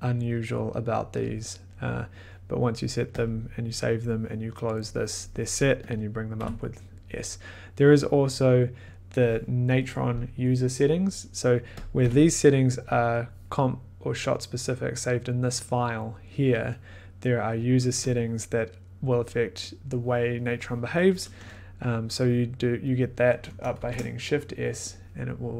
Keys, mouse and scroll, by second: 3.1 click, 4.7 click, 4.7 click, 4.8 click, 5.9 click, 6.4 s, 8.9 click, 11.8 click, 12.0 s, 17.5 click, 18.1 click, 23.7 s.